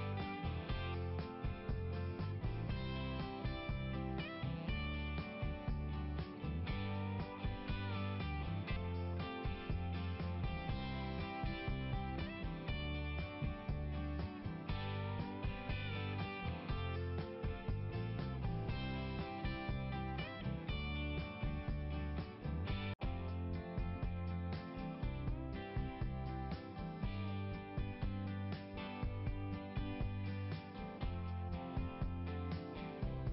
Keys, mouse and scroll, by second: 0.4 click, 1.0-1.5 typing, 1.4 Return, 1.7 Return, 9.4 click, 9.6 click, 10.1-12.2 typing, 12.3 Return, 17.6 click, 20.2 click, 21.3 click, 24.3 click, 25.1 click, 27.2 click, 27.5 click.